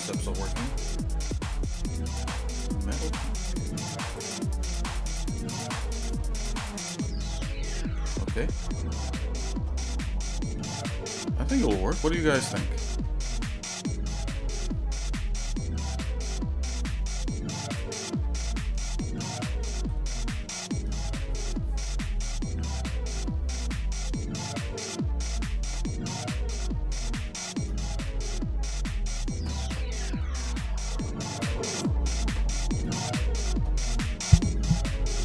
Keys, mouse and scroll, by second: 3.1 click, 4.4 click, 5.7 click, 6.4 shift+middle click, 7.7 middle click, 8.4 scroll up 1, 9.2 shift+middle click, 10.3 shift+middle click, 18.0 click, 18.6 shift+middle click, 19.0 shift+middle click, 19.6 scroll up 1, 19.9 scroll down 1, 20.0 scroll down 1, 27.2 shift+middle click, 32.9 middle click.